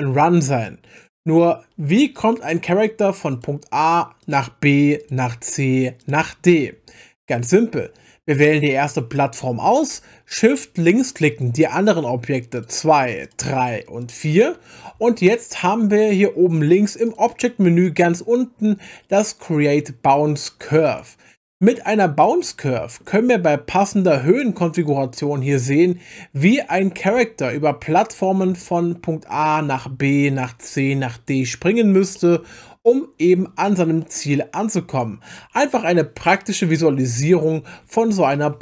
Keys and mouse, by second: 1.0 click, 2.3 middle drag, 3.3 click, 4.2 click, 5.0 click, 6.0 click, 8.9 click, 12.6 shift+click, 13.2 shift+click, 14.0 shift+click, 22.2-23.0 middle drag, 24.4-26.8 drag, 28.0-28.6 middle drag, 32.1-32.7 middle drag.